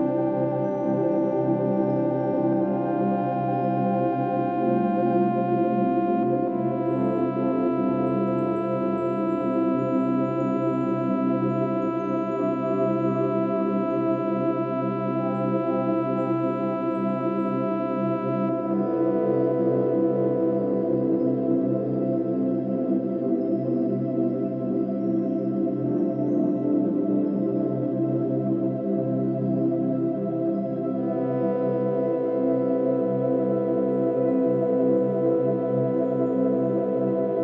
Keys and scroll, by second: 18.6 ctrl+z.